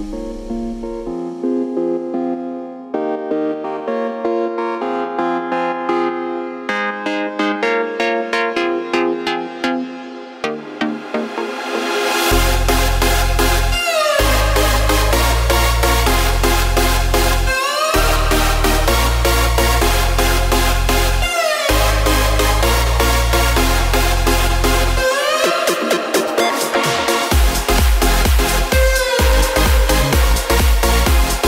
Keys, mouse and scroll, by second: 6.2 space, 7.7-11.5 drag, 18.0-31.4 right drag.